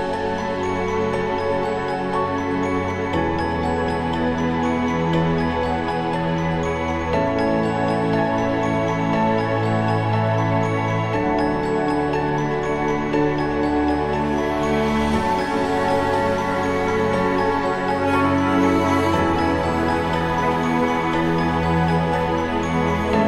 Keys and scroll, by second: 5.1 ctrl+=, 6.9 ctrl+=, 11.6 ctrl+-, 22.6 ctrl+-.